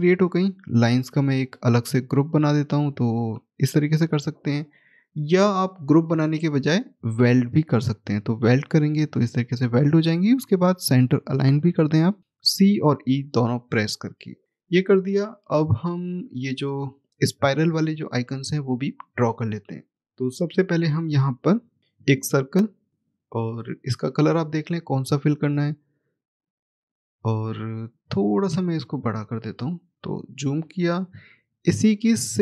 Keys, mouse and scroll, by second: 0.6 click, 8.4 click, 10.4 shift+click, 12.5 click, 15.4 middle click, 16.2-19.0 scroll up 1, 20.0 click, 20.7 scroll down 1, 21.3 middle click, 21.8 click, 26.2 right click, 27.8 click, 28.5-29.5 scroll up 1, 29.5 shift+click, 32.1 shift+click.